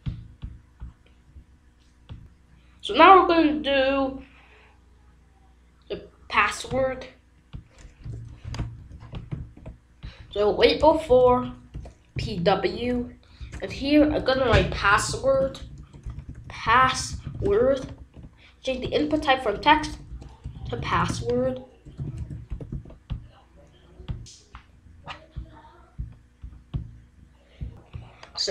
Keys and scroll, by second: 7.9 Return, 8.7 ctrl+v, 9.3 ctrl+s, 10.7 Right, 11.0 BackSpace, 11.7 p, 12.1 w, 12.2 Right, 14.3 BackSpace, 15.8-17.9 typing, 17.9 ctrl+s, 19.5-22.6 typing, 22.7 ctrl+s.